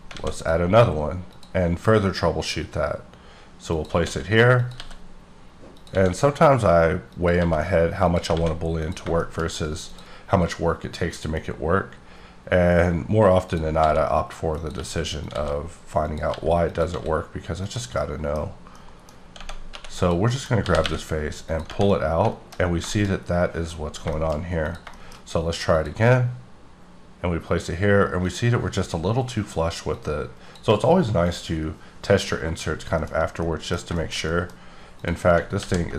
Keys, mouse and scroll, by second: 0.1 alt+a, 1.3 click, 3.7 click, 4.0 s, 4.6 click, 4.7 g, 5.7 click, 5.9 s, 7.1 click, 7.4 g, 8.0 click, 8.3 alt+a, 8.7 click, 9.2 shift+middle click, 9.5 scroll up 1, 9.8 click, 11.1 click, 12.0-13.1 scroll down 1, 13.5 click, 13.7 s, 14.5 click, 14.8 g, 15.2 click, 15.3 s, 16.0 click, 16.3 g, 16.6 click, 18.0 middle click, 18.4 scroll up 2, 18.7 middle click, 19.1 scroll up 2, 19.3 Tab, 19.7 3, 19.9 click, 20.3 middle click, 20.5 scroll up 1, 20.6 g, 20.9 y, 21.4 click, 21.9 middle click, 22.5-23.2 scroll down 3, 22.8 shift+middle click, 23.9 scroll down 1, 24.2 shift+middle click, 24.6 click, 24.9 shift+middle click, 25.7 click, 28.2 click, 29.9 click, 31.2 click, 32.9 middle click, 33.0 scroll up 4, 33.3 middle click, 34.9 click, 35.6 alt+g.